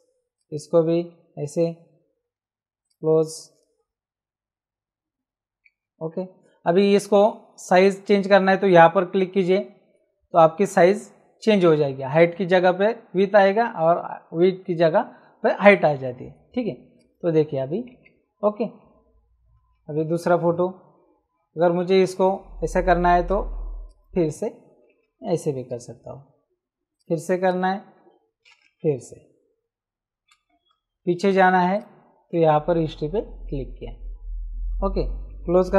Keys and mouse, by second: 1.0 Return, 2.2 ctrl+w, 2.8 click, 5.8 c, 10.3 click, 16.9 click, 17.9 Return, 17.9 KP_Enter, 19.7 ctrl+Tab, 23.2 click, 26.9 click, 28.8 Right, 30.7 Return, 31.7 click, 35.6 ctrl+w.